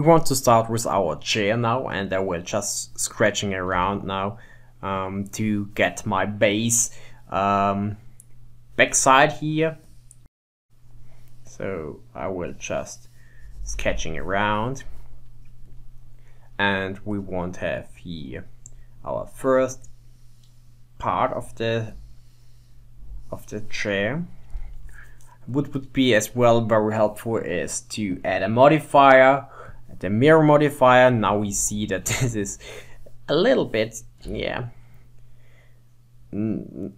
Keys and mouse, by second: 3.8 f, 6.8 f, 9.3-18.7 drag, 19.3 click, 19.5 click, 19.8 click, 21.1 click, 21.7 click, 23.1-26.1 drag, 26.3-28.2 drag, 30.0-31.6 drag, 31.6 Tab, 32.1 a, 34.3 g.